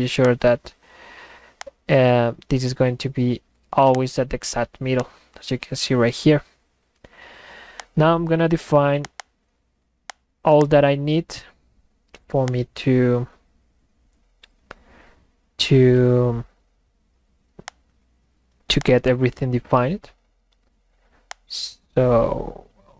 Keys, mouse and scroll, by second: 0.2-0.9 drag, 1.6 click, 4.0 click, 5.0-7.5 drag, 7.8 click, 9.0 click, 9.2 click, 10.1 click, 10.6 click, 12.5 click, 17.7 click, 18.8 click, 21.3 click.